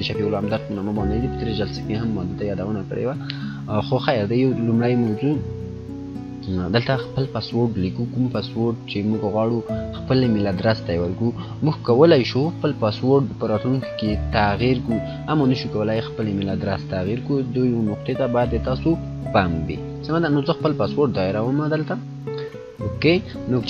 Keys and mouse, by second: 5.0 click, 15.6 click, 16.2 click, 22.0 typing.